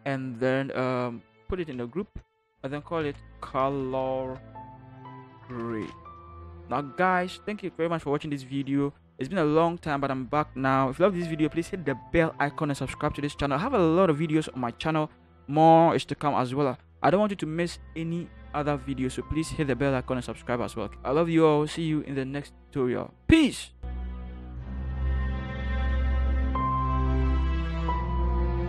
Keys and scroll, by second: 2.0 ctrl+g, 3.0-6.2 typing, 7.8 ctrl+0.